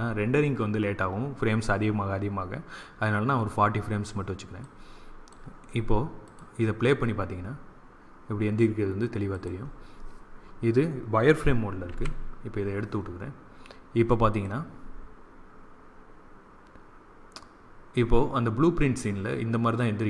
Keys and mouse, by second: 4.5-7.9 drag, 9.3-11.1 drag, 11.8 z, 14.2-16.0 drag.